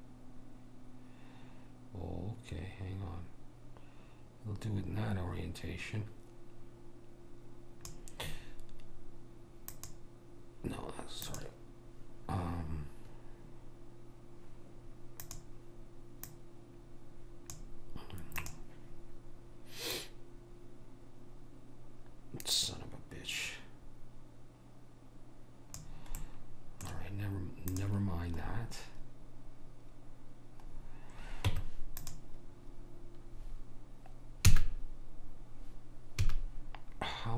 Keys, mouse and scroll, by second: 9.9-13.2 drag, 15.3-18.3 drag, 26.3-27.8 middle drag, 27.8 click, 31.6 Tab, 36.3 a.